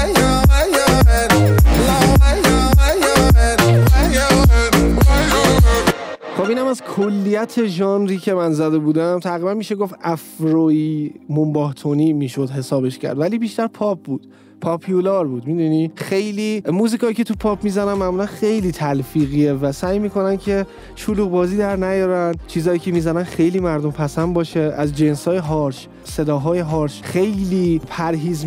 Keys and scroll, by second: 6.1 space.